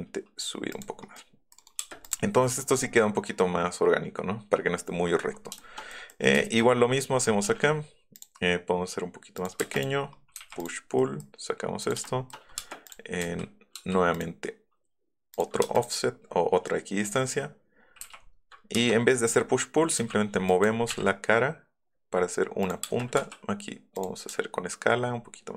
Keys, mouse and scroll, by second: 1.1 click, 2.0 click, 2.4 middle click, 2.7 middle click, 4.4-5.6 middle drag, 5.6 shift+click, 6.1 click, 6.6 middle click, 6.6 scroll up 1, 6.8 middle click, 7.3 middle click, 7.4 g, 7.7 middle click, 8.1 click, 9.3 click, 9.7 click, 10.6 click, 11.0 click, 11.8 click, 12.1 shift+click, 12.5 scroll up 1, 12.5 space, 12.8 click, 13.7 f, 14.1 click, 15.3 click, 18.0 p, 18.8 space, 19.9 m, 20.4 click, 22.6 click, 22.9 space, 23.9 click.